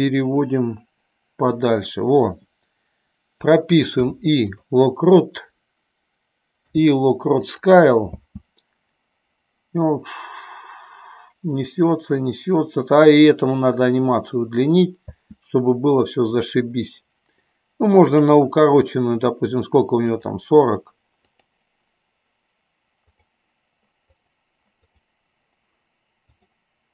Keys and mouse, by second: 4.0 i, 6.6 i, 8.1 space, 15.3 space, 18.2 click, 20.2 click, 21.4 click, 23.3 click, 24.2 click, 24.9 click, 26.5 click.